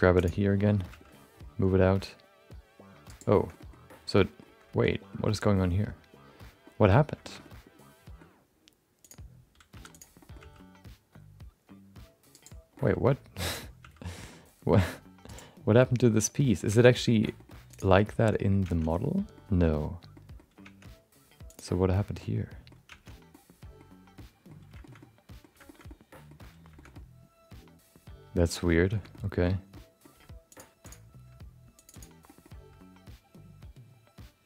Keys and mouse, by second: 0.1 3, 0.1 click, 0.4 middle click, 0.9 g, 3.4 middle click, 3.5 middle click, 4.2 middle click, 4.9 middle click, 5.5 middle click, 6.6 middle click, 7.2 shift+middle click, 7.4 middle click, 9.0 click, 9.7 2, 9.9 click, 10.2 middle click, 10.4 g, 12.7 middle click, 13.4 click, 13.8 g, 15.8 middle click, 16.4 middle click, 16.9 Tab, 17.3 middle click, 18.1 shift+middle click, 18.3 middle click, 18.7 Tab, 19.3 middle click, 20.1 middle click, 21.0 Tab, 21.4 click, 22.2 middle click, 22.9 Tab, 23.3 middle click, 24.1 middle click, 24.8 shift+middle click, 25.0 middle click, 25.6 shift+middle click, 25.8 middle click, 26.8-28.5 middle drag, 28.9 shift+middle click, 29.7 middle click, 30.5 shift+click, 30.8 shift+click, 31.7 click, 32.2 middle click, 32.5 g.